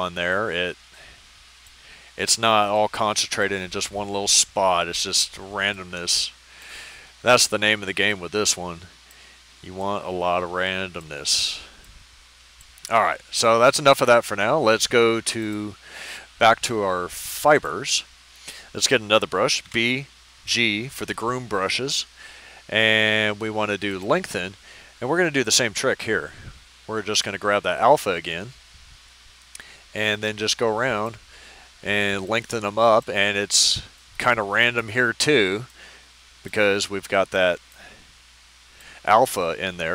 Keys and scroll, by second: 19.6 b, 20.4 g.